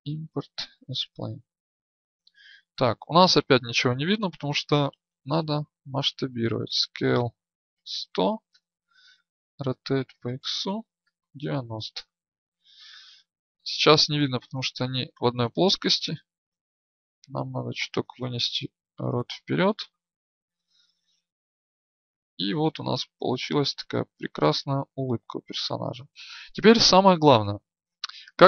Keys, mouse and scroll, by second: 0.0-6.5 drag, 9.6 r, 15.1 alt+shift+Insert, 16.6-20.4 drag, 20.4 KP_1, 21.7-23.7 drag.